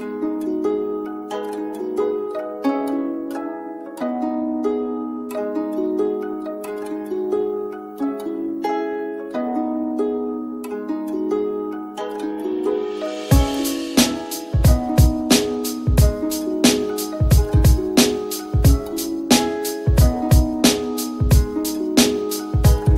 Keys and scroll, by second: 5.5 t.